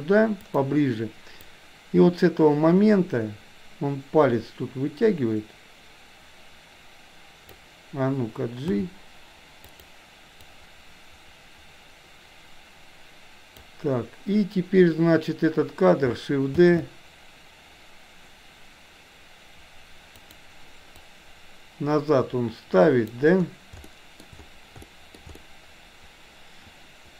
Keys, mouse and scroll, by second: 1.5-7.5 drag, 8.7 g, 10.4-13.6 drag, 21.0-23.1 drag, 23.7-24.2 shift+middle drag, 24.9 shift+middle click, 25.4-27.1 middle drag.